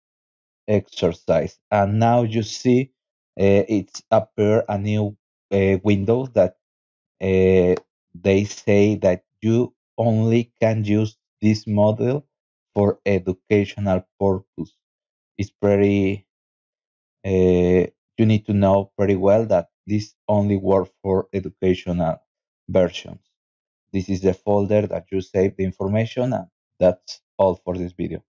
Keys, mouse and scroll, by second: 6.7 click, 11.6 click, 12.8 click, 21.7 click, 21.9 click, 23.0-23.7 scroll down 1.